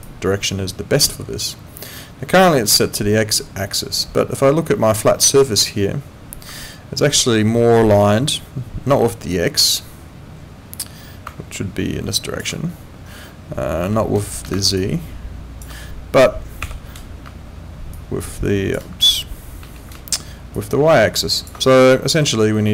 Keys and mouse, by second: 0.0 click, 7.0 ctrl+2.